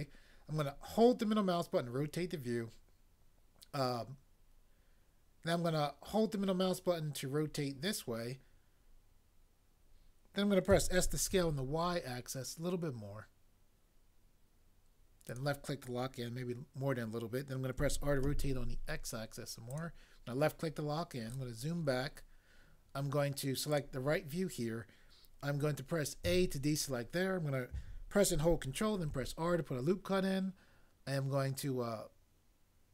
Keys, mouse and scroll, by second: 10.7 s, 11.3 y, 17.8-18.2 typing, 26.2 a, 29.1 ctrl+r.